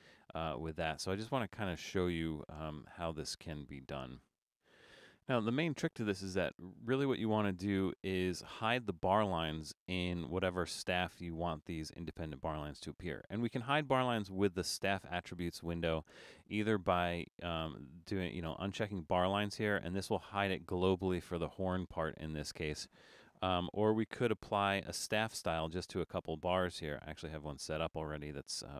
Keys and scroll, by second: 23.6 super+z.